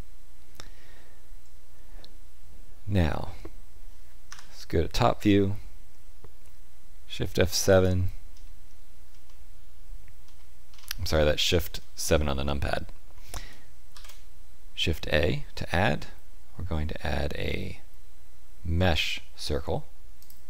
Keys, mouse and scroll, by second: 4.2 KP_7, 7.6 shift+right click, 9.2 shift+middle click, 10.6-11.3 scroll up 5, 11.3 shift+middle click, 13.8 shift+a.